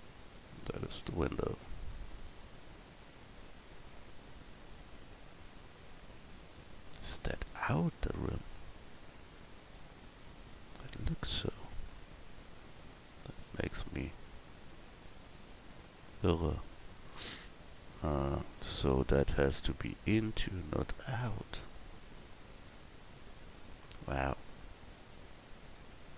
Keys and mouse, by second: 4.7-6.6 middle drag, 13.0 right click, 13.5 Tab, 15.5 middle click, 18.3 click, 19.9-23.0 middle drag, 23.0-25.2 right drag, 25.2 middle click.